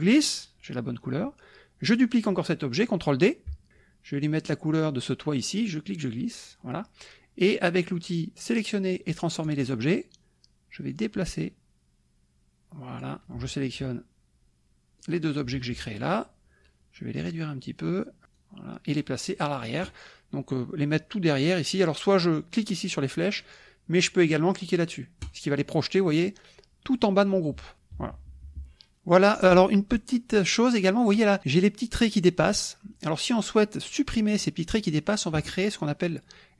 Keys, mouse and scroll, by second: 5.8 click, 9.4 click, 10.9-13.2 drag, 15.0 click, 15.5 shift+click, 17.3 click, 18.4 click, 25.2 click, 28.0 KP_Subtract, 30.2 middle click, 30.2 scroll up 1.